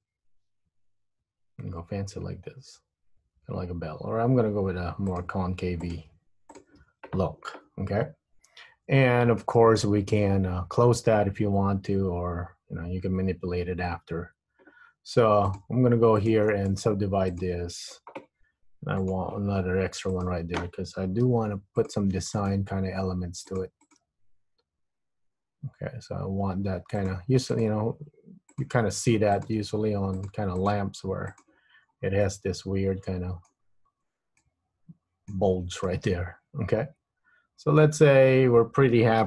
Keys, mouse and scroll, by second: 0.0 click, 0.5 g, 6.0 click, 6.2 g, 8.9-9.4 scroll up 1, 9.5 shift+middle click, 15.6 click, 16.4 shift+click, 16.8 right click, 19.1 click, 20.3 click, 20.4 shift+click, 21.4 g, 22.5 click, 22.6 g, 23.9 click, 24.2 g, 27.7 click, 27.8 g, 29.5 click, 29.6 g, 30.8 click, 31.0 g, 32.0-32.4 scroll down 4, 32.4 middle click, 34.6 middle click, 36.0 middle click, 38.3-38.8 scroll up 4.